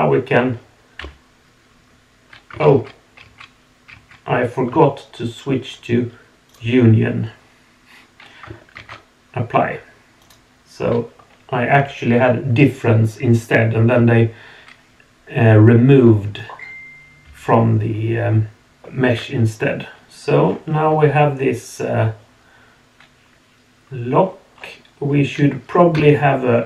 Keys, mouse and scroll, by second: 1.0 Delete, 2.6 ctrl+z, 3.2 ctrl+z, 6.6 click, 8.9 ctrl+a, 10.2 click, 17.2 Delete, 18.8-19.1 shift+middle drag, 18.8 scroll up 1, 19.6-20.3 middle drag, 20.4 scroll down 2, 20.9-21.9 drag, 20.9 middle click, 21.9-22.3 middle drag, 22.1 click, 22.3 drag, 22.3-23.7 middle drag, 23.7 click, 24.5 scroll up 2, 25.9 KP_1.